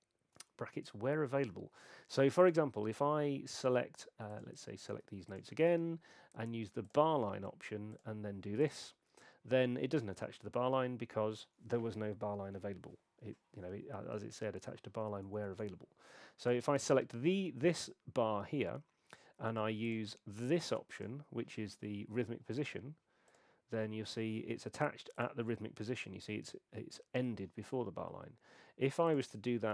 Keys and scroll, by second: 15.5 BackSpace.